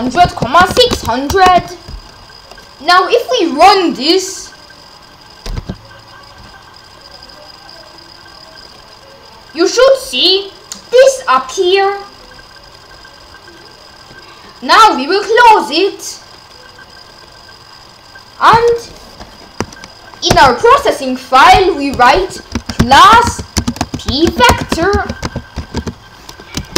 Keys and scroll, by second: 0.0-1.5 typing, 5.5 ;, 20.3 Return, 22.3-26.7 typing.